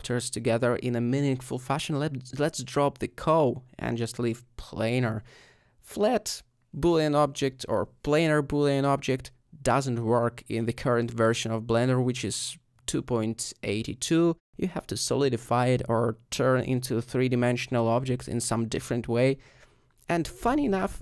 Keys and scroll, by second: 4.9 Tab, 5.4 typing, 20.4 g.